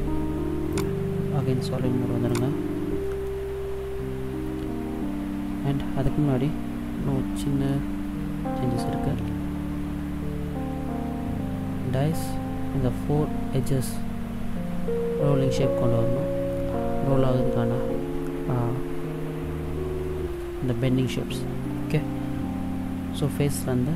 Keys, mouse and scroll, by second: 0.8 click, 3.3 middle click, 7.7 middle click, 9.2 Tab.